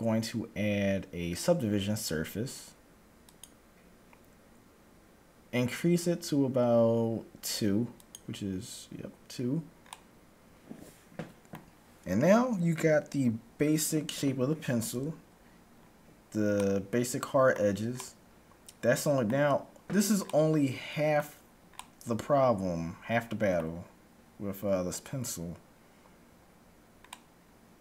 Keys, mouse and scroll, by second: 8.0-9.7 drag, 9.8-12.0 middle drag, 15.0 KP_1, 15.8-16.3 scroll up 1, 16.3-19.8 middle drag, 19.8-20.3 scroll down 1, 20.3-23.3 middle drag, 27.2-27.8 middle drag.